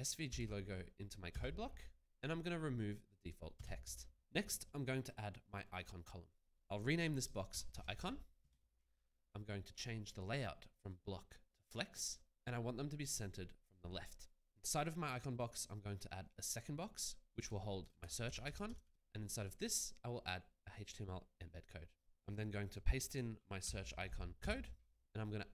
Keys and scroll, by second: 0.7 ctrl+v, 1.3 Return, 3.5 BackSpace, 6.7 ctrl+a, 7.5-8.5 typing, 17.8-19.1 typing, 24.1 ctrl+v, 24.4 Return.